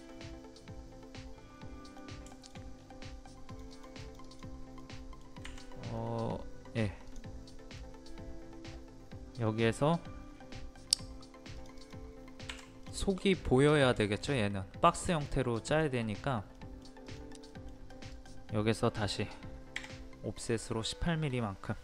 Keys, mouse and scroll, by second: 0.1-2.3 middle drag, 2.3 shift+middle click, 2.7 scroll up 1, 3.5 click, 4.8 middle click, 5.4 Escape, 6.0 middle click, 7.1 click, 7.5-8.5 middle drag, 11.6 click, 12.5 Escape, 12.9 scroll down 1, 13.5 middle click, 13.8 scroll down 1, 14.0 shift+middle click, 16.1-16.4 scroll up 1, 16.6 middle click, 17.0 click, 17.5 middle click, 17.7 scroll up 1, 17.9 click, 19.8 o, 20.3 click.